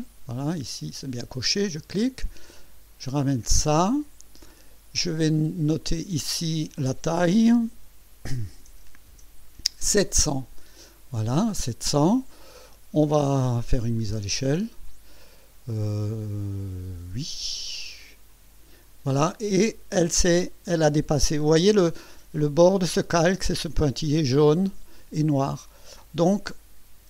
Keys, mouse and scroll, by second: 1.5 click, 2.5-4.5 drag, 5.8 click, 7.7 KP_7, 8.6 KP_0, 18.3 click.